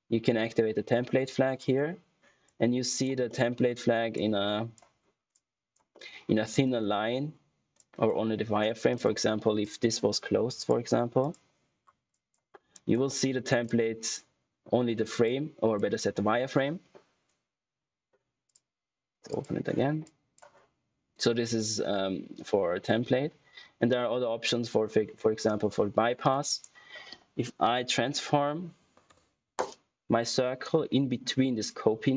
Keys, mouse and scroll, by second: 1.5 click, 3.2 middle click, 3.5-4.1 scroll up 1, 4.1 click, 4.9-5.2 scroll up 1, 5.2 click, 5.8 middle click, 7.2-7.7 scroll down 1, 7.7 click, 11.7 scroll down 1, 12.4 scroll down 1, 12.7 click, 13.0 middle click, 13.6 click, 18.4 click, 26.1 click, 26.4 right click, 27.3-28.5 typing, 28.6 Down, 29.0 Return.